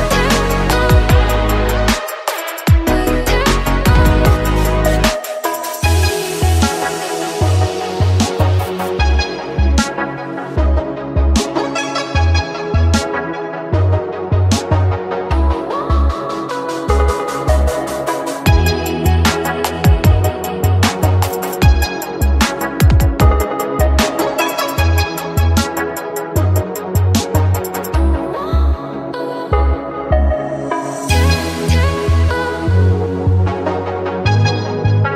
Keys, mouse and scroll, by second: 0.7 click, 2.9-5.2 middle drag, 5.3 click, 6.3 middle click, 7.1 r, 8.9-10.2 middle drag, 10.2 click, 11.7-12.9 middle drag, 12.9 click, 15.0-16.2 middle drag, 16.2-16.6 scroll up 2, 16.6 click, 17.7 alt+shift+click, 18.2 alt+shift+click, 19.4-20.1 middle drag, 20.1 shift+click, 21.0-21.7 middle drag, 21.7 shift+click, 22.6-23.3 middle drag, 23.3 click, 24.9 middle click, 25.1-25.8 scroll up 2, 25.8 middle click, 26.7 click, 27.1-28.8 middle drag, 28.8 shift+click, 29.5 middle click, 30.1 shift+click, 30.8-32.0 middle drag, 32.0 click.